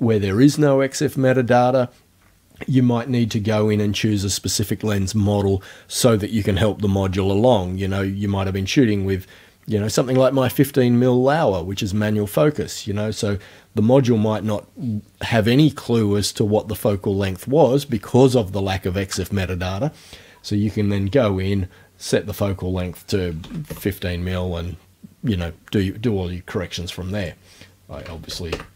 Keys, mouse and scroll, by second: 22.3 right click, 23.4 KP_5, 23.7 KP_Enter, 27.2 right click, 28.0 KP_2, 28.1 KP_0, 28.5 KP_Enter.